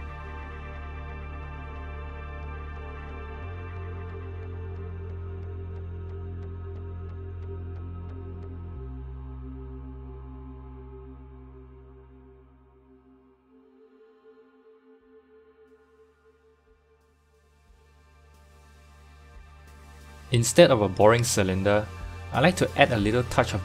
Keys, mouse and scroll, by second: 1.4 shift+middle click, 2.2 g, 3.7-4.0 scroll up 4, 4.0-5.6 shift+middle drag, 5.6 KP_1, 5.8 KP_1, 6.3-6.9 scroll down 3, 7.0 g, 9.4 click, 10.0 click, 10.2 g, 13.2 click, 13.3 g, 16.9-17.7 scroll up 1, 17.7-18.0 scroll up 1, 18.0 ctrl+r, 21.2-21.8 scroll up 1, 21.8-23.5 shift+middle drag, 23.5 click.